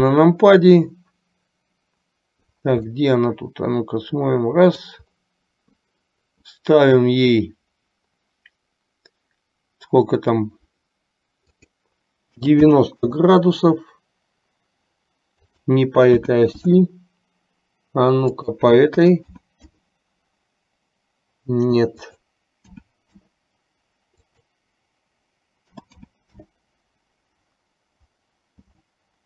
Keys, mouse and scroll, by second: 3.1 scroll up 1, 3.3-5.1 middle drag, 11.7-13.4 drag, 15.4-17.1 drag, 18.5-20.1 drag, 22.1-23.7 drag, 24.3-29.1 drag.